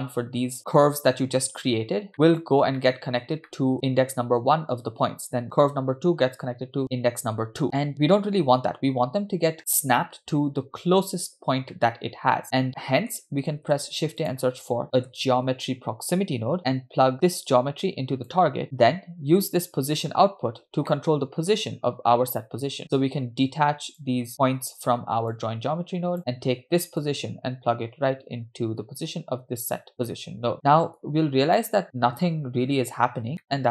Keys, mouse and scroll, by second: 1.9 scroll down 2, 2.1 middle drag, 2.9 middle click, 3.5 shift+middle drag, 8.1 middle click, 9.0-9.6 scroll up 3, 9.6 shift+middle click, 11.8-12.4 middle drag, 12.8 middle click, 12.8-13.2 scroll down 2, 13.7 shift+a, 17.2-18.3 drag, 18.6 middle click, 18.6-19.2 scroll up 6, 20.0 click, 20.7 scroll down 2, 20.9 middle click, 24.0-24.3 drag, 25.4-26.2 drag, 26.2-27.0 scroll down 2, 27.0-29.9 drag, 30.5 middle click, 31.0 click, 33.4 scroll down 2, 33.5 middle click.